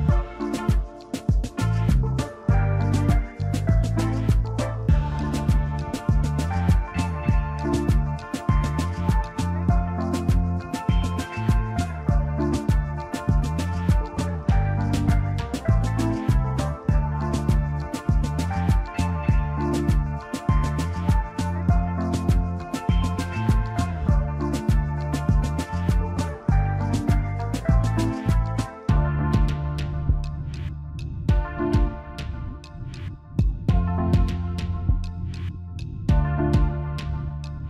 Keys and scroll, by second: 2.9 space, 5.5 ctrl+g, 7.5 space, 9.4 alt+space, 9.9 alt+shift+space, 11.3 d, 11.7 space, 12.1 ctrl+alt+shift+z, 12.2 v, 14.2 ctrl+z, 24.1-25.8 typing, 31.1 BackSpace, 35.0 ctrl+shift+g.